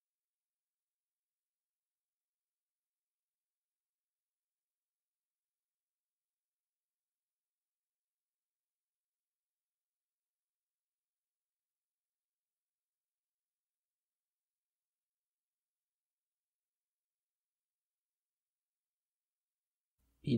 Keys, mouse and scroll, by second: 1.3 KP_3, 2.2-2.6 scroll down 1, 2.6-4.0 middle drag, 4.0 KP_1, 4.7-6.0 shift+middle drag, 6.0 s, 17.4 scroll up 3, 17.7-18.8 shift+middle drag, 18.8 click, 19.5-20.3 shift+middle drag.